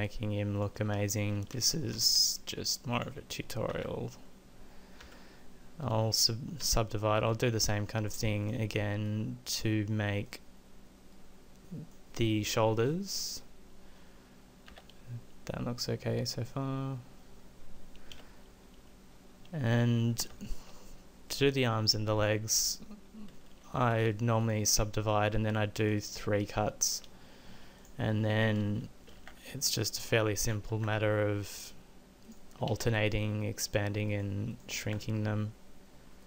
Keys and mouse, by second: 1.9 e, 3.7 ctrl+z, 5.0 w, 6.6 w, 14.7 z, 18.1 z, 23.8 w, 27.8-29.2 middle drag, 29.2 ctrl+a, 30.5 click, 30.8 ctrl+a, 32.7 ctrl+a, 34.8 ctrl+a.